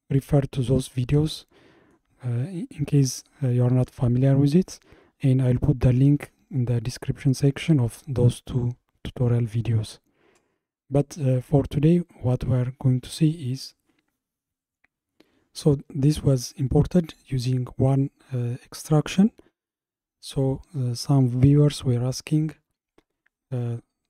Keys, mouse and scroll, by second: 0.4-5.7 middle drag, 12.5-15.5 middle drag, 16.8-19.9 middle drag.